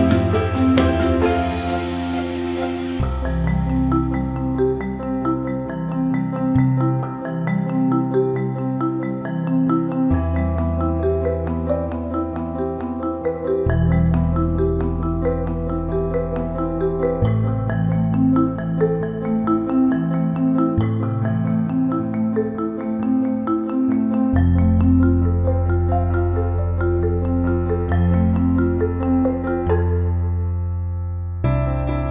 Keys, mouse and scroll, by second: 3.4 click, 4.8-6.3 drag, 7.7 alt+middle click, 9.1 alt+middle click, 10.0-11.2 drag, 13.7 click, 14.1 click, 17.3 click, 18.4 ctrl+z, 18.7 click, 22.0 click, 22.4-23.2 drag, 24.4-26.0 drag, 26.3 click, 26.7 click, 29.7 click, 30.1 click, 31.3 alt+middle click.